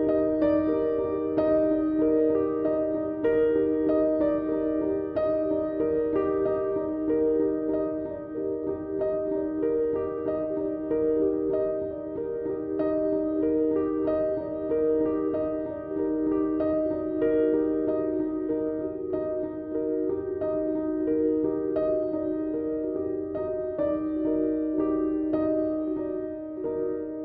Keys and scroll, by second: 5.7 Delete, 7.3 Delete, 8.5 Delete, 18.2 Delete, 24.7 ].